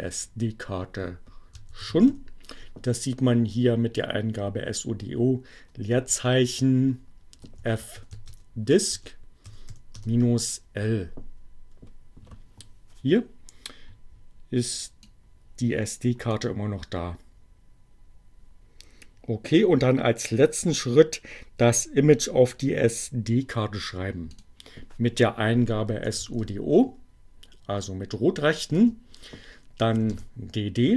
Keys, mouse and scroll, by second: 0.3-2.1 typing, 5.7 space, 6.1 f, 7.4-9.8 typing, 14.7-16.3 drag, 24.3 click, 25.7-27.0 typing, 28.6 space, 28.9 d.